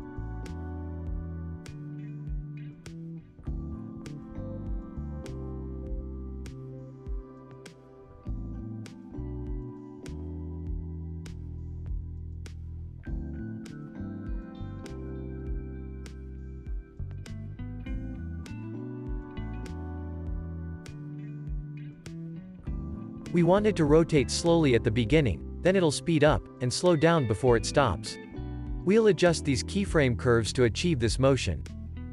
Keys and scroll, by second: 2.8 =, 17.8 ctrl+s, 18.5 z, 21.4 4, 21.5 Return.